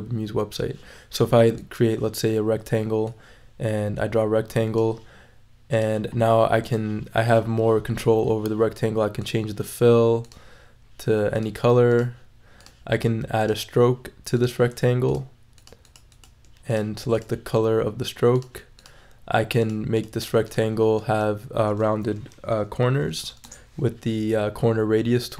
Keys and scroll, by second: 22.8-23.7 typing.